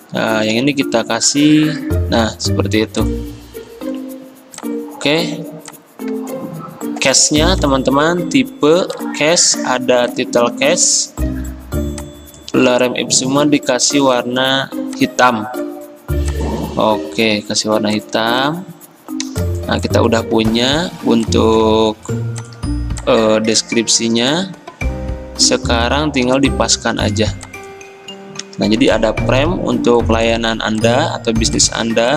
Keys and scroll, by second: 0.5 i, 11.3 t, 28.5 ctrl+g.